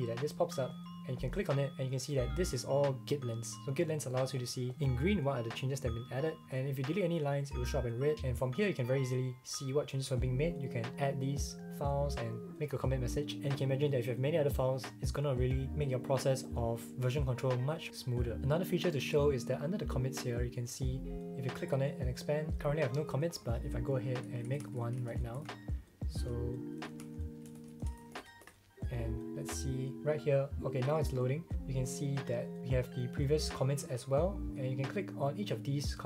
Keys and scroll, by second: 24.1-28.2 typing, 28.4 Return.